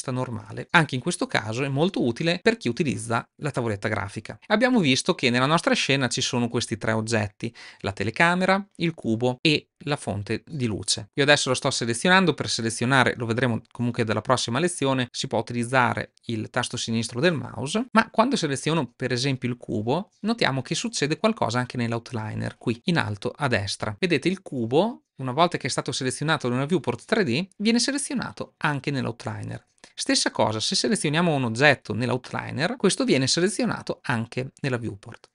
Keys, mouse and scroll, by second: 7.4 drag, 8.4 click.